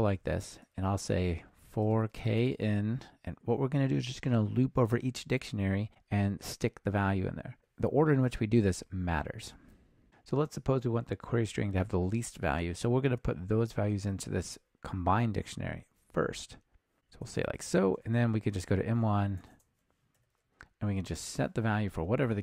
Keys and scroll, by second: 17.3 Return.